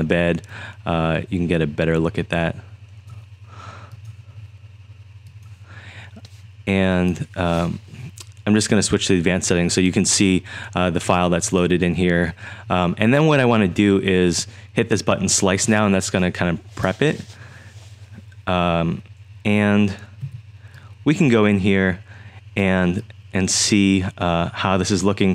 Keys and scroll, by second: 20.2 z.